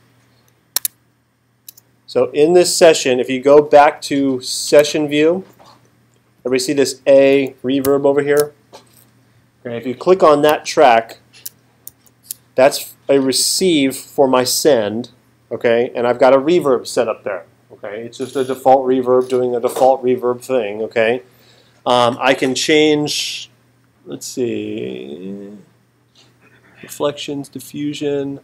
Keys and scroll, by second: 0.8 super+Tab, 7.8 alt+super+8, 11.9 alt+super+8.